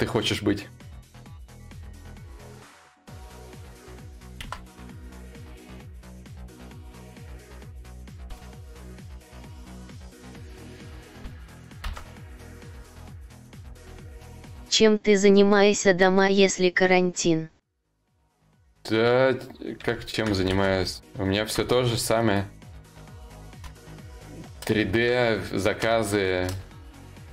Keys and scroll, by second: 11.5 ctrl+z, 20.1 ctrl+z.